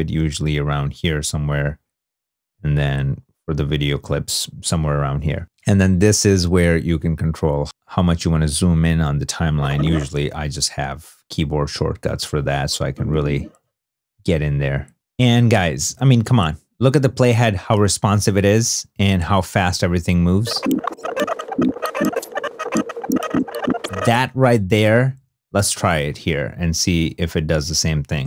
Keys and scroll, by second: 8.9 3, 9.9 2, 10.6 i, 25.1 super+Tab.